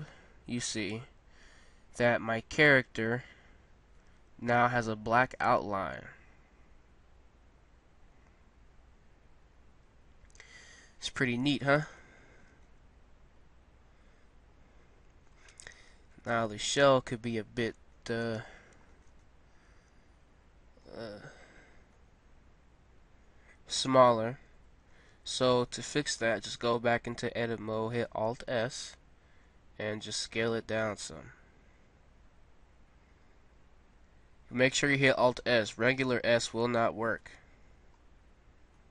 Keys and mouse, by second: 4.2 a, 4.6-5.9 middle drag, 10.4 middle click, 12.0-14.7 middle drag, 15.6-18.9 middle drag, 21.0-23.2 middle drag, 25.2 Tab, 28.7 alt+s, 37.4 Tab.